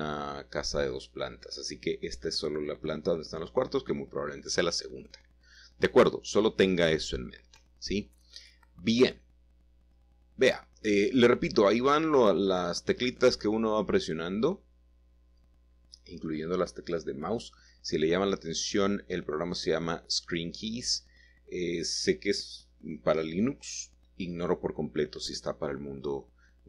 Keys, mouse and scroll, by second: 0.0-1.6 drag, 0.4 s, 1.9-3.0 drag, 5.1 g, 6.1 z, 6.8-7.9 drag, 8.6-9.2 typing, 11.1 click, 11.4 middle click, 11.6 click, 11.9 middle click, 12.5 KP_7, 13.6-14.9 shift+middle drag, 14.3-14.7 scroll up 1, 15.1 shift+middle click, 15.4-16.5 shift+middle drag, 17.3 typing, 18.6 click, 20.7-21.8 middle drag, 21.6-22.2 scroll up 1, 24.0-24.5 typing.